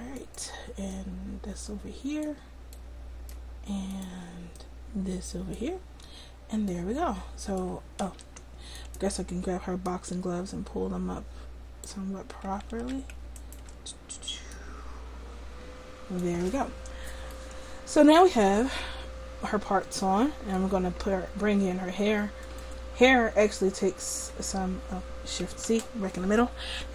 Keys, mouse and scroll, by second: 0.2 click, 0.9-2.3 middle drag, 2.3 click, 4.0 click, 4.7 middle click, 5.9 click, 8.1 Tab, 10.7 click, 12.8 ctrl+z, 15.4 click, 16.7-19.4 middle drag, 22.5-26.9 drag, 25.7 shift+c.